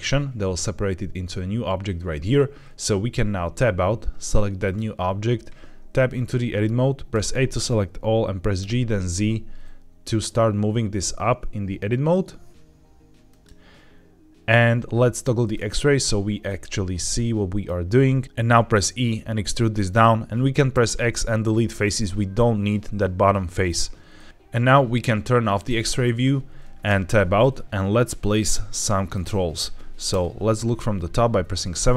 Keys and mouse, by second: 3.2 Tab, 4.5 click, 5.7 Tab, 7.0 a, 8.5 g, 9.1 z, 13.2 click, 15.5 click, 16.4-17.6 middle drag, 18.4 e, 19.8 click, 20.6 x, 24.1 middle click, 25.5 click, 26.8 Tab, 28.8 middle click, 30.0 KP_7.